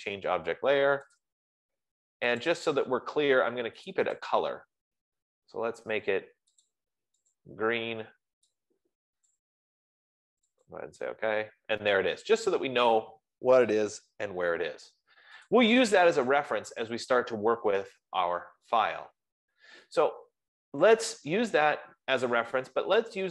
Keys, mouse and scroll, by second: 0.0-0.4 typing, 1.6 click, 2.8 click, 3.8 F15, 4.3 click, 4.7 click, 7.1 click, 7.8 click, 10.0 click, 11.3 click.